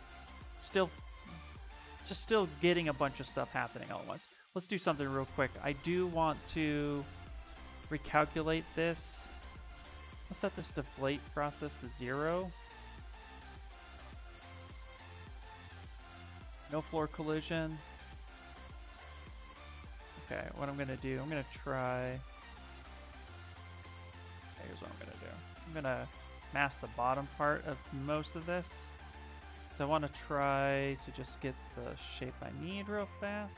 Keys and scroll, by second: 24.1 ctrl+z.